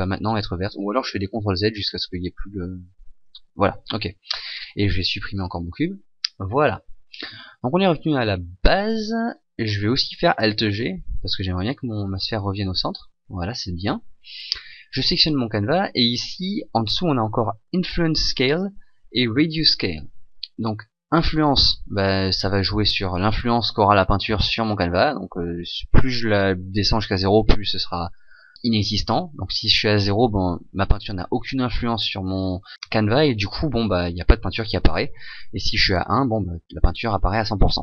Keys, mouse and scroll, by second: 1.2 ctrl+z, 1.4 ctrl+z, 1.6 ctrl+z, 1.8 ctrl+z, 2.2 ctrl+z, 2.4 ctrl+z, 2.6 ctrl+z, 2.8 ctrl+z, 3.0 ctrl+z, 4.4 right click, 5.1 Delete, 9.3 right click, 10.6 alt+g, 11.7 click, 12.5 click, 12.9 click, 14.5 right click.